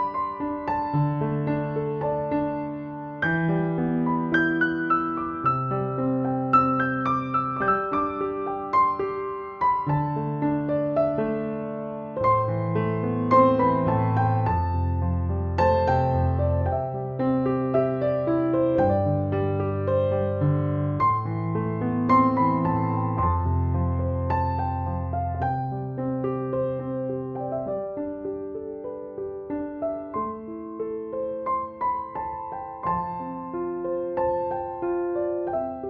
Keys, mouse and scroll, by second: 13.3 right click, 14.4-18.8 drag, 28.6-35.8 drag.